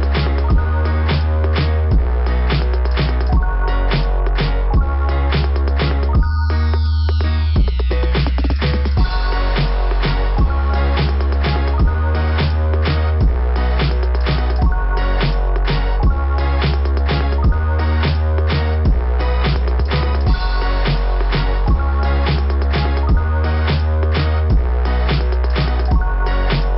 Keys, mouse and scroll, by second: 1.7 click, 4.0 click, 8.3 scroll down 1, 9.5 click, 12.6 click, 12.9 click, 13.1 click, 13.4 click, 15.4 click, 24.4 click, 24.4 typing, 24.5 click, 25.5 ].